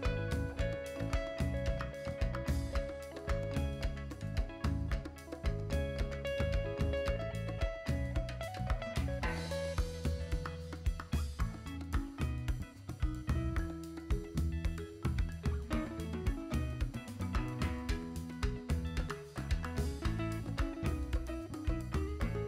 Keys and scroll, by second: 21.7 b.